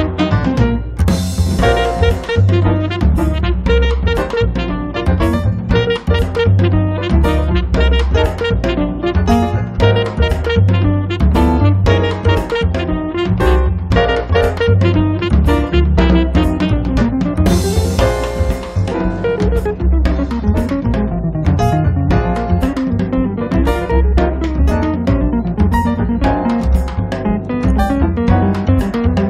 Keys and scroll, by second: 4.2 m, 5.5 Up, 6.4 1, 8.0 5, 8.4 Return, 12.4 Escape, 13.1 space, 15.6 m, 17.6 3, 18.0 0, 18.2 Return, 19.3 x, 19.8 8, 20.1 Return, 25.4 space, 25.9 Escape.